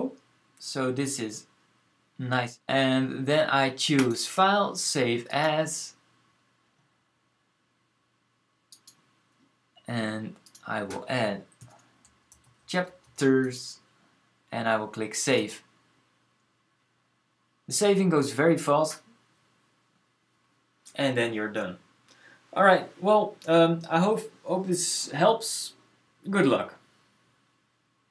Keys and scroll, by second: 11.2-13.7 typing.